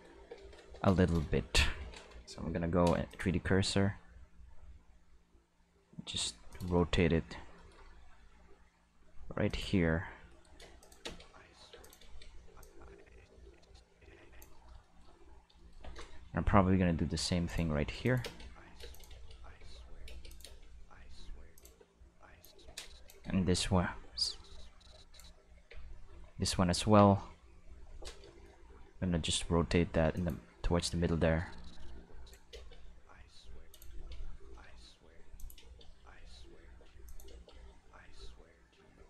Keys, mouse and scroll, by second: 2.4 ., 3.1 click, 3.9 r, 6.5 click, 6.8-8.2 shift+middle drag, 8.2 r, 9.5 click, 10.8 click, 11.0 space, 11.7 space, 11.8 click, 12.1 space, 12.5 space, 12.6-14.4 drag, 15.3 middle click, 15.6 shift+middle click, 16.5 r, 17.5 click, 18.1 click, 18.2-22.4 typing, 18.9 click, 20.3 click, 21.6 click, 22.4-23.1 drag, 24.2-25.2 drag, 25.6 Tab, 26.1 a, 26.8 Tab, 27.2 q, 28.8 r, 30.2 click, 30.8-32.4 drag, 32.4 Tab, 32.5-35.6 typing, 33.7 click, 35.4 click, 36.8 space, 37.1 click, 37.3 space, 38.9 space.